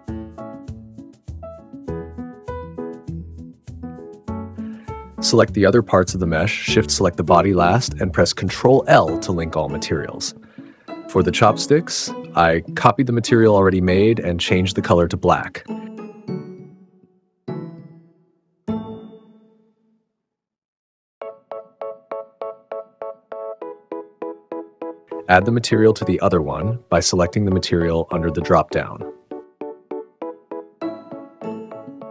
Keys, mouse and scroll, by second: 1.6 r, 4.1 click, 4.7 shift+click, 5.1 click, 5.6 click, 7.5 ctrl+l, 11.3-11.8 drag, 12.8 click, 14.1 click, 14.5 click, 16.6-18.4 drag, 19.5 click, 20.1 click, 20.8-22.3 drag, 22.7 shift+middle click, 23.6 click, 27.0 click, 27.9-28.8 drag, 29.1-30.3 drag.